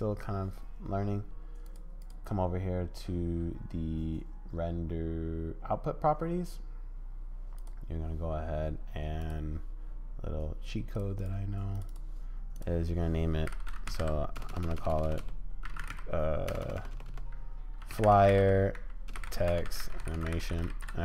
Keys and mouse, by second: 1.7 click, 7.5 click.